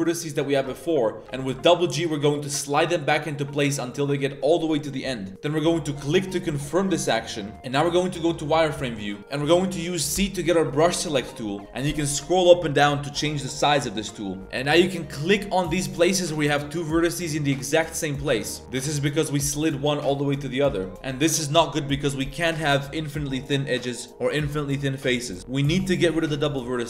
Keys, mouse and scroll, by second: 0.4 shift+right click, 1.3 g, 5.3 g, 7.5 a, 7.5 z, 8.6 z, 10.2 c, 18.8 g, 20.7 right click, 21.1 z, 26.8 middle click.